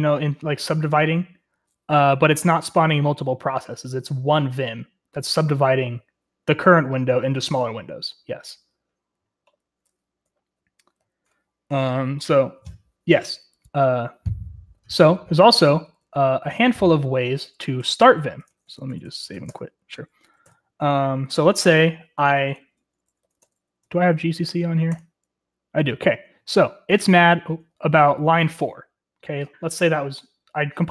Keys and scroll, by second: 10.2-11.2 typing, 14.8-19.8 typing, 18.5 Escape, 20.4 ctrl+l, 22.8-24.3 typing, 23.8 Tab, 24.5 Tab, 24.9 Return, 26.3-27.6 typing.